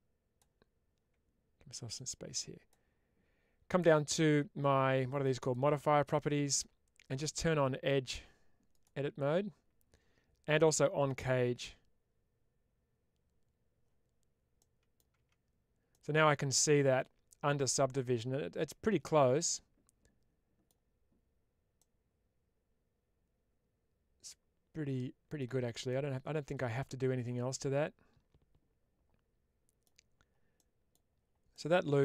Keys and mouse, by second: 1.8 click, 8.7 click, 11.1-14.4 drag, 14.4 middle click, 15.8-20.5 middle drag, 21.6-25.2 middle drag, 25.7-29.7 middle drag, 30.4 middle click, 31.5 middle click.